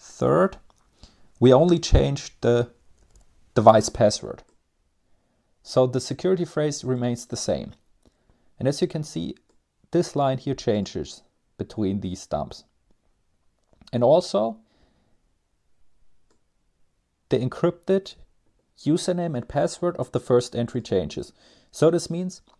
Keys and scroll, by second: 0.5 Down, 0.6-1.1 Down, 1.5-2.4 Down, 2.7 Down.